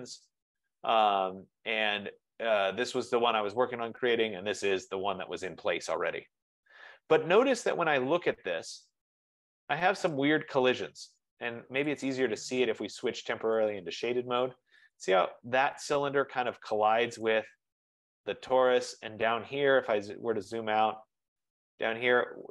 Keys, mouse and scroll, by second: 0.7-1.5 scroll, 3.1 scroll, 4.0-4.3 scroll, 4.4 scroll down 8, 5.5 scroll up 1, 6.5 scroll, 7.1-7.7 scroll, 8.6-9.1 scroll, 10.3 click, 12.2 click, 13.8 click, 15.3 click, 17.3 right click, 18.9 scroll, 19.0-19.3 scroll down 3, 19.6-20.3 scroll down 9, 20.9-21.3 scroll up 6, 21.5-22.3 scroll.